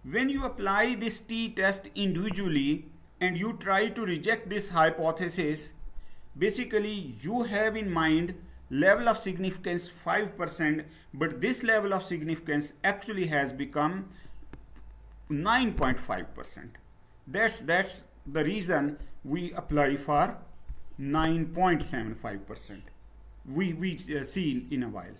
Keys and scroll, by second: 25.0 Down.